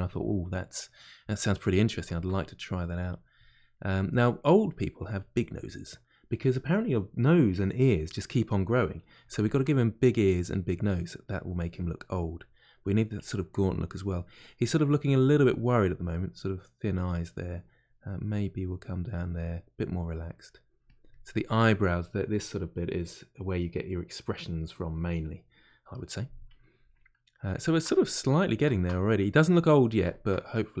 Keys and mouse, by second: 0.7-2.8 middle drag, 2.8 click, 3.7-5.0 middle drag, 5.0 click, 5.6-10.2 middle drag, 10.2-11.8 drag, 11.8-16.0 middle drag, 16.0-20.2 drag, 20.2 middle click, 20.8-25.6 shift+drag, 25.6-30.8 middle drag.